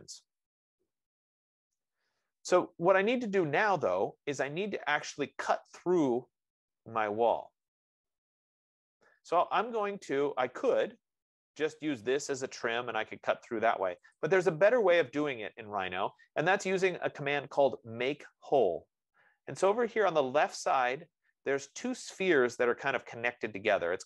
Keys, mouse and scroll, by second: 3.7-8.6 right drag, 10.3-10.8 scroll, 11.4-11.8 scroll, 13.3 click, 14.6 click.